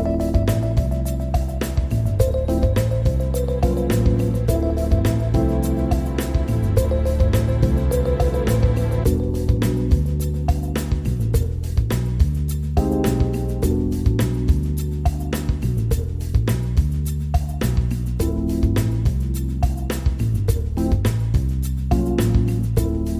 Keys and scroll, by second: 16.4 ctrl+z.